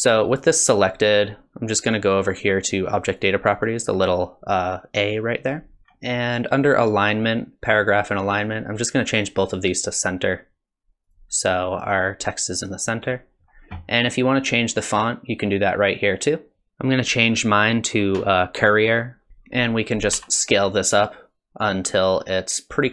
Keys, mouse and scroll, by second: 0.3 click, 3.2 click, 5.8 scroll down 3, 8.9 click, 10.2 click, 14.4 click, 20.1 s.